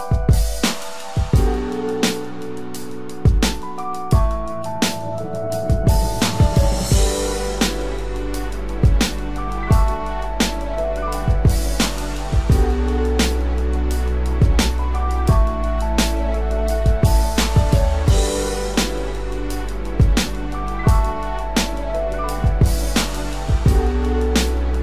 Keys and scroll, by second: 1.9 ctrl+=, 2.2 ctrl+space, 2.7 ctrl+=, 3.9 ctrl+=, 10.1 ctrl+z, 17.5 ctrl+z, 20.7 ctrl+z, 23.1 ctrl+z.